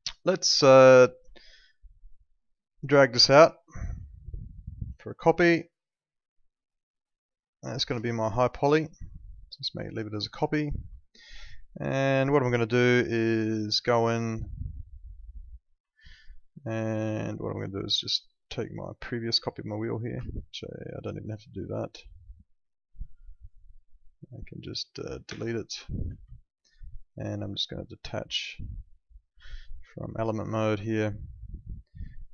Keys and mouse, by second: 0.7 click, 1.3 alt+middle click, 3.4 alt+middle click, 4.3 alt+middle click, 4.5 click, 6.3 shift+click, 10.3 click, 11.0 alt+middle click, 11.9 alt+middle click, 12.3 middle click, 13.6 click, 14.1 alt+middle click, 15.2 click, 16.0 alt+middle click, 17.2 alt+middle click, 18.2 click, 20.1 ctrl+z, 25.2 Delete, 26.3 alt+middle click, 26.8 click, 29.5 alt+middle click, 30.7 click.